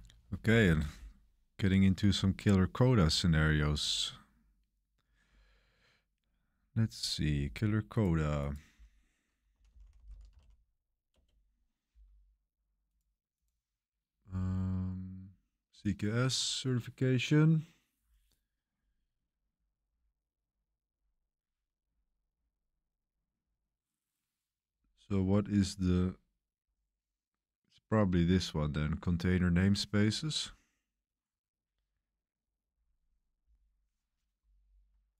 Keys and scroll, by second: 9.2-10.8 typing, 11.1 Return.